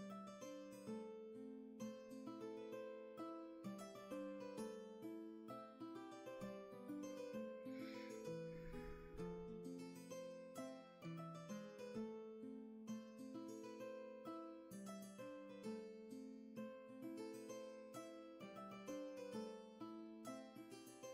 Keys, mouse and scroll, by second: 9.1 ctrl+z, 16.5 scroll down 1, 18.6 space.